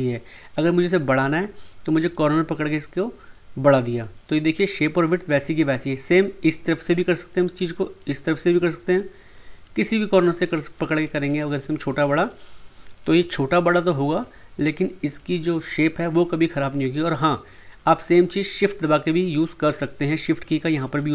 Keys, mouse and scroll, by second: 0.3-3.4 drag, 6.4-13.1 drag, 13.1-14.5 drag, 14.5-17.5 drag.